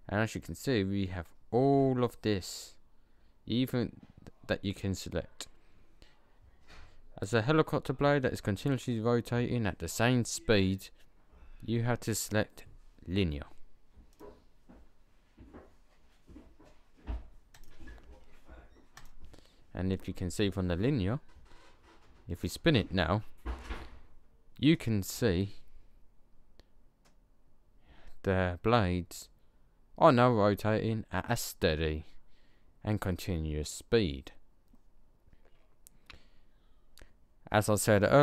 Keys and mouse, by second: 17.4-18.5 drag, 19.7-22.3 middle drag, 22.3 click.